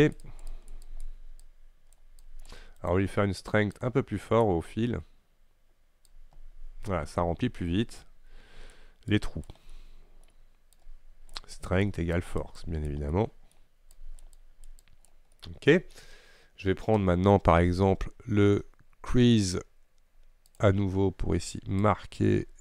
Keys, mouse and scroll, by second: 3.9-6.2 right drag, 6.2-9.8 drag, 9.8 middle click, 10.4-10.8 scroll up 1, 10.8-13.2 drag, 13.2 middle click, 13.6-14.0 scroll up 1, 14.0-15.4 drag, 15.4 middle click, 16.2-17.8 scroll down 4, 20.6-22.6 drag.